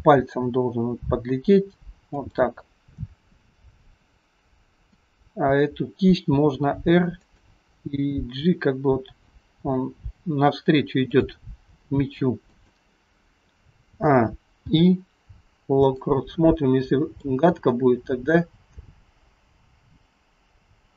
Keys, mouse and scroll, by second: 0.0 g, 5.0 click, 6.4 r, 8.0 g, 12.0 g, 14.0 a, 14.7 i, 17.3 click.